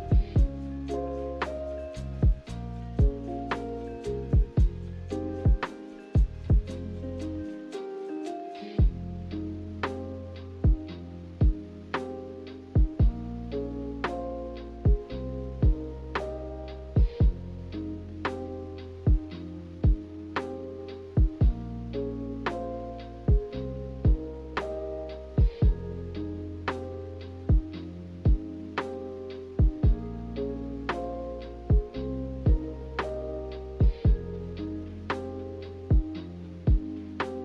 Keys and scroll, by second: 0.0-0.7 typing, 24.5 g, 28.2 z.